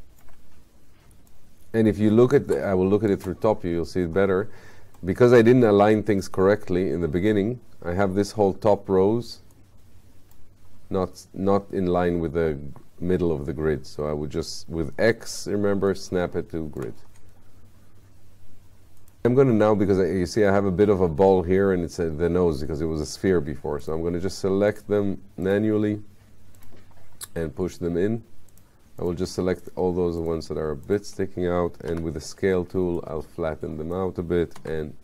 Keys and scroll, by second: 15.1 x, 19.3 q, 34.7 w.